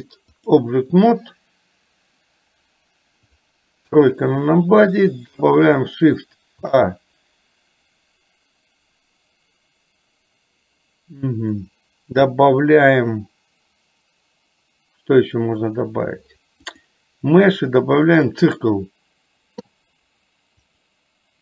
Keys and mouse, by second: 3.9 KP_3, 6.6 shift+a, 20.8-21.4 drag.